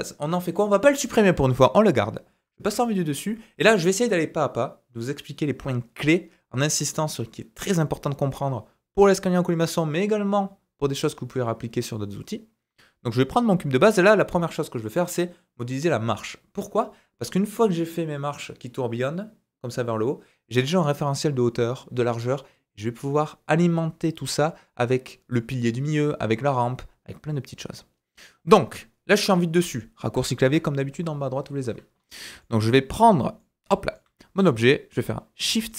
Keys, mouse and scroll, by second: 0.5 middle click, 2.6 KP_7, 28.8 scroll up 2, 29.1 middle click, 30.4 KP_7, 31.2-35.7 drag, 31.9 scroll up 1, 32.1 scroll down 2, 32.4 shift+middle click, 32.8 scroll up 2, 33.1 shift+scroll down 2, 33.4 shift+middle click, 34.5-35.4 scroll down 1, 35.4 g.